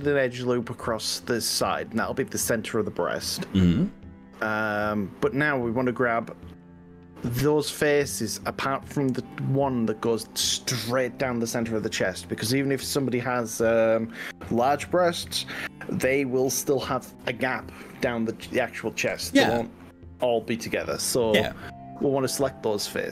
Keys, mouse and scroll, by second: 0.4-6.0 middle drag, 6.0-8.8 drag, 14.0 middle click, 14.2-16.8 drag, 22.9 click.